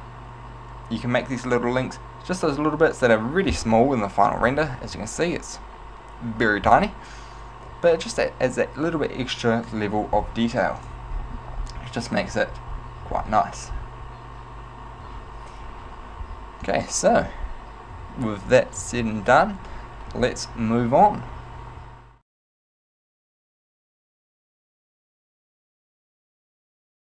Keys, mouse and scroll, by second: 3.7 KP_0, 17.6-18.9 scroll down 2, 18.1 a, 18.9 Tab.